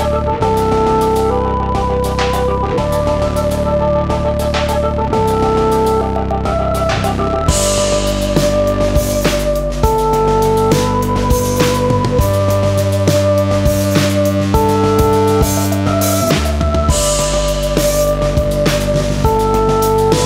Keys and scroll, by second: 16.0 ctrl+8.